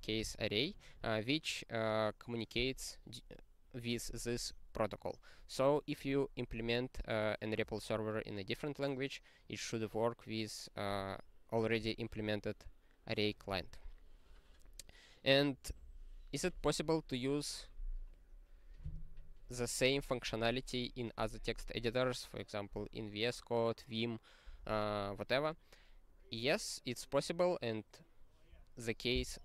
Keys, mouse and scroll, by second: 14.0-17.6 scroll down 24, 17.6 scroll down 2.